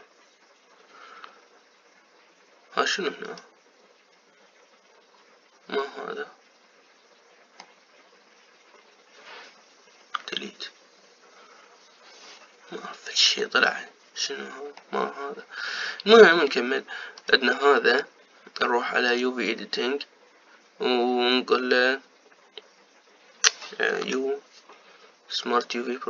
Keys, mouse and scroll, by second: 4.6 click, 6.7-9.7 middle drag, 11.8 Delete, 14.4-18.5 middle drag, 18.5 click, 20.3 click.